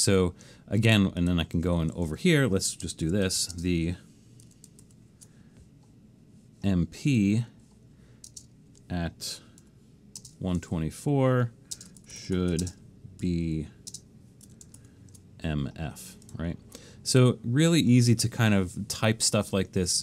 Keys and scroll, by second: 2.1 Left, 2.8-3.9 typing, 4.8 alt+shift+super+s, 8.3 space, 9.4-10.2 typing, 11.0 Down, 11.8-14.0 typing, 14.8 alt+shift+super+s.